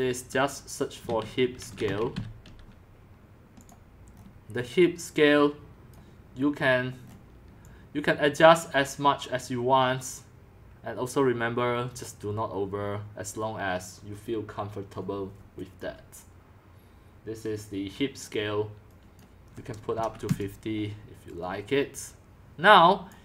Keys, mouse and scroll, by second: 0.7-2.6 typing, 3.6 click, 4.2-6.0 scroll down 6, 6.0-7.0 drag, 7.0-7.6 scroll down 5, 7.6-8.5 middle drag, 7.6 scroll, 8.5-14.5 drag, 18.2-19.2 drag, 19.7-20.5 typing, 23.1-23.2 drag.